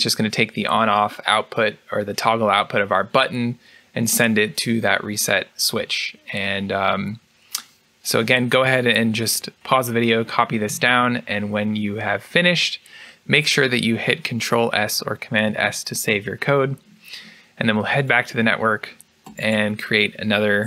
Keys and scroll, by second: 15.4 ctrl+s, 20.5 Escape.